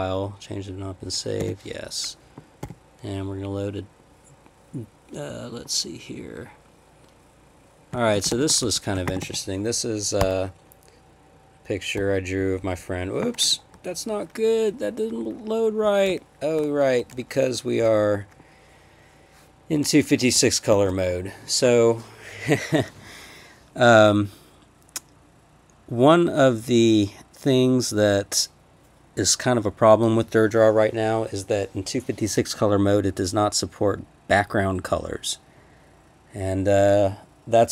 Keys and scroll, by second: 1.4 y, 2.6 d, 7.7-9.7 typing, 10.2 Return, 12.0 Down, 12.4 Down, 12.6 Down, 20.7 alt+o.